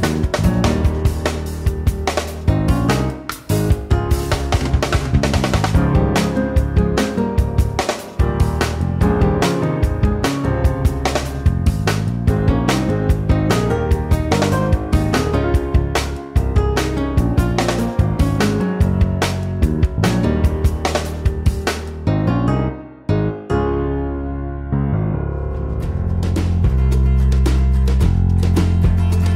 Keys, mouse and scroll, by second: 7.3-8.6 typing, 11.6-12.8 typing, 18.3 0.